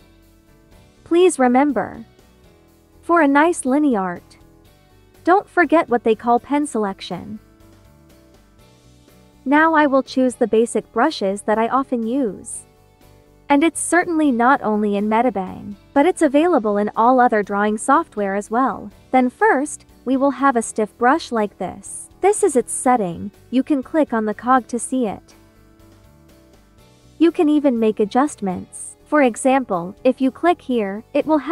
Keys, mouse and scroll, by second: 2.2 space, 2.4 click, 2.8 space, 6.8-9.2 drag, 12.6-18.1 drag, 20.0-21.9 drag, 25.2-28.0 drag, 29.7 click.